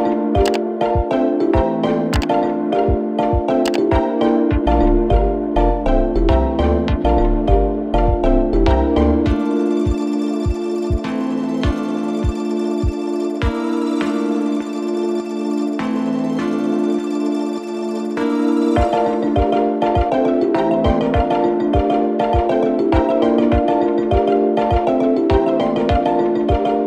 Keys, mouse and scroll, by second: 0.5-0.9 alt+scroll down 1, 2.1 click, 6.2 click, 6.3 click, 9.2-26.8 drag.